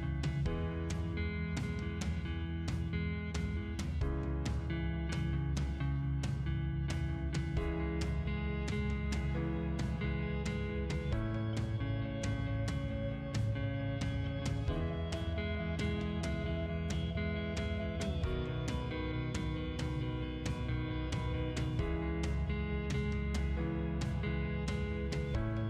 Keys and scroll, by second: 7.1 m, 7.7 space, 17.1 c, 17.4 o, 17.7 space, 19.9 Escape, 21.4 c, 22.2 space.